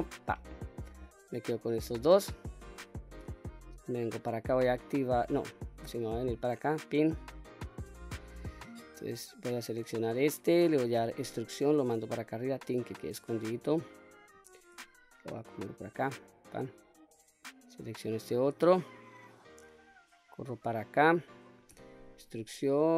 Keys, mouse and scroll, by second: 0.7 scroll up 2, 1.5 click, 2.8 shift+middle click, 5.9-7.6 drag, 8.0-9.8 scroll up 2, 9.8 click, 11.0 e, 12.3 click, 13.4 click, 14.8 g, 15.9 click, 17.5 click, 19.4-21.0 drag, 21.8 e.